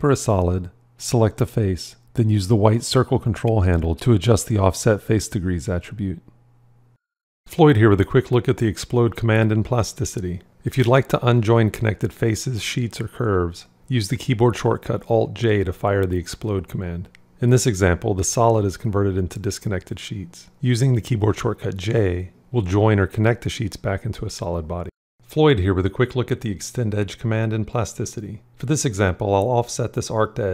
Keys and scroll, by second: 14.9 alt+j, 20.7 j, 29.4 o.